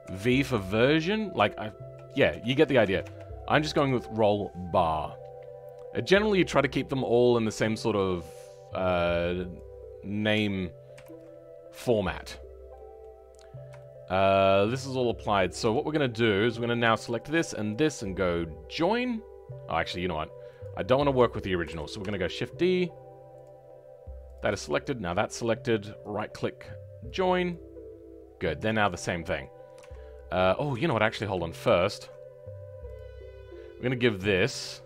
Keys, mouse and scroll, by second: 3.7 BackSpace, 5.5-7.8 scroll up 3, 7.8-12.3 drag, 12.3-12.7 scroll down 2, 12.7 middle click, 13.4 scroll up 2, 13.7-15.5 shift+middle drag, 15.5 Tab, 15.9 middle click, 16.6 click, 23.3-24.3 drag, 27.4-28.8 right drag, 28.8 middle click, 29.7 Tab, 30.0-30.8 scroll up 2, 30.8 ctrl+z, 32.0-32.9 scroll down 3, 32.9 click.